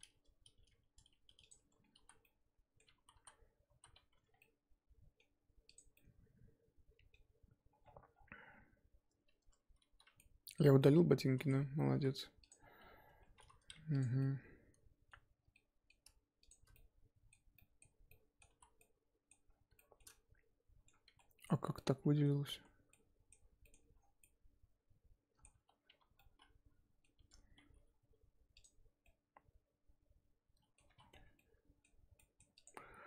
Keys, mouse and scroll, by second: 0.0 r, 1.7 Tab, 2.0 z, 2.2 middle click, 3.0 ctrl+z, 3.1 ctrl+z, 3.7 ctrl+z, 4.1 Tab, 4.3 scroll down 3, 4.4-5.7 middle drag, 5.7 click, 5.9 scroll down 2, 5.9-10.6 middle drag, 10.6 scroll down 1, 10.8 middle click, 11.6-11.9 scroll up 1, 11.9 KP_1, 12.5 click, 12.6-13.1 scroll up 7, 13.1 Tab, 13.3 3, 14.0 alt+click, 14.2-15.4 middle drag, 15.4 scroll down 1, 15.5 middle click, 16.5 alt+shift+click, 16.7-18.5 middle drag, 18.5 z, 18.8 middle click, 19.5 scroll up 2, 19.7-21.1 shift+middle drag, 21.1 z, 21.2 middle click, 21.6 scroll up 1, 21.7 middle click, 22.5 ctrl+z, 22.9-23.9 ctrl+middle drag, 23.9 scroll down 1, 24.2-25.7 middle drag, 25.7 scroll up 2, 25.9 1, 26.2-27.2 middle drag, 27.2 a, 29.0-30.9 middle drag, 30.9 3, 31.1 scroll down 1, 31.3-32.6 middle drag, 32.6 click.